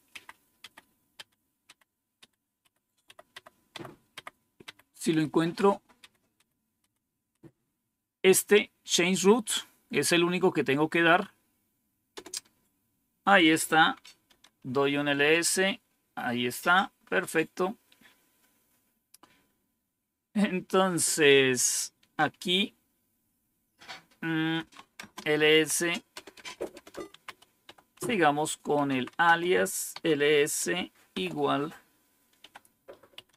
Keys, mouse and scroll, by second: 0.0 Up, 0.5 Up, 1.1 Up, 1.6 Up, 2.1 Up, 2.5 Up, 3.0 Up, 3.2 Up, 3.6 Up, 4.0 Up, 4.5 Up, 5.0 Up, 5.5 Up, 5.9 Up, 6.3 Up, 6.7 Up, 7.2 Up, 12.0 Return, 14.0-14.8 typing, 15.1 Return, 24.2-25.1 typing, 26.4-31.0 typing, 32.3-33.3 typing.